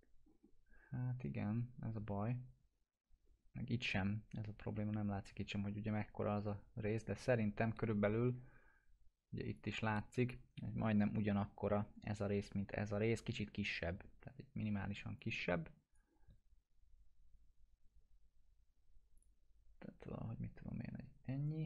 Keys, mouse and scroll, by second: 2.2 scroll down 1, 3.2 scroll up 1, 9.6-10.5 drag, 15.2-16.1 drag, 19.2 click.